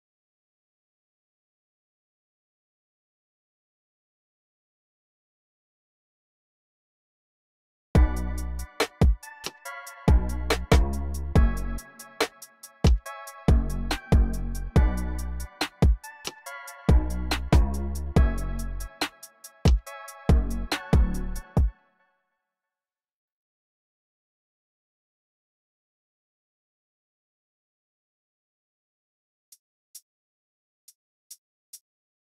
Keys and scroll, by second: 0.4 super+r, 0.5 super+r, 1.7 super+r, 2.3-4.7 typing, 7.4-8.5 typing, 17.3-18.4 typing, 21.3 space, 21.8 e, 22.2 y, 23.1 y, 23.9 super+a, 24.2 super+9, 28.2 super+w, 29.1-29.9 typing, 31.7-32.3 typing.